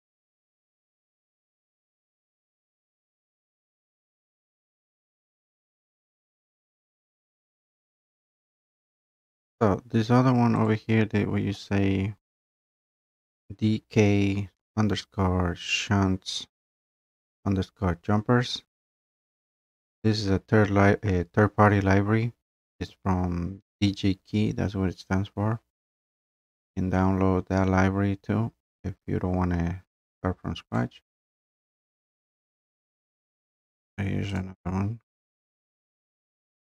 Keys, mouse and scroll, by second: 0.0 click, 0.6 click, 0.9 click, 1.4 click, 1.5 click, 1.9 scroll, 2.1 click, 2.5 click, 2.7 click, 2.9 click, 3.3 middle click, 3.8 click, 4.4 middle click, 5.0 click, 5.5 click, 5.7 click, 6.0 click, 6.4 click, 8.2 click, 8.8 click, 9.1 click, 10.6 click, 30.7 click, 32.7 click, 34.4 click.